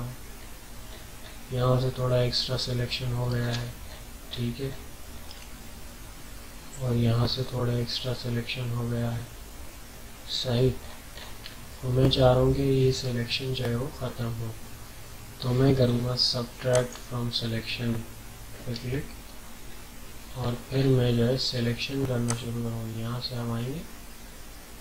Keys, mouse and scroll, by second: 0.1 scroll up 1, 0.7-1.1 scroll up 1, 2.9 alt+scroll down 1, 3.3 scroll up 2, 3.8 ctrl+scroll up 1, 5.2-5.6 ctrl+scroll up 1, 6.0 scroll down 1, 10.8 scroll up 1, 11.5-13.3 alt+scroll down 2, 16.7 click, 18.8 ctrl+scroll down 1, 20.3 alt+scroll up 1, 20.9 alt+scroll up 1, 22.2-24.8 drag.